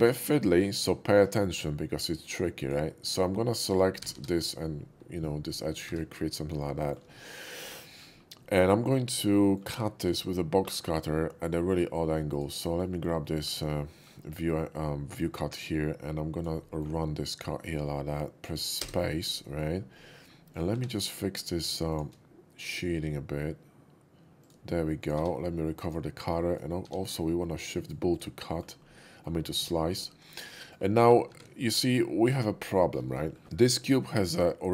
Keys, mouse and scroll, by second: 1.1 ctrl+b, 2.6 click, 2.9 click, 4.0 g, 5.6 click, 5.9 Tab, 6.4 middle click, 6.8 shift+middle click, 7.1 shift+middle drag, 7.9 shift+middle click, 8.3 shift+middle click, 9.3 shift+middle click, 10.6 alt+w, 12.3 click, 12.8 middle click, 13.2 alt+w, 13.2 middle click, 13.8 middle drag, 14.2 middle click, 15.1-16.4 drag, 16.6 shift+middle click, 18.8 space, 19.4 middle drag, 19.9-20.2 middle drag, 20.5 click, 20.7 q, 21.9 shift+click, 24.4 shift+click, 25.0 click, 25.2 q, 25.7 click, 26.5 click, 27.7 click, 28.1 click, 28.4 middle click, 29.0 middle click, 30.1 middle click, 30.5 middle drag, 31.8-32.2 shift+middle drag, 32.4 scroll up 1, 32.7 shift+middle drag, 33.1 scroll up 1, 33.3 shift+middle click, 33.8-34.7 shift+middle drag.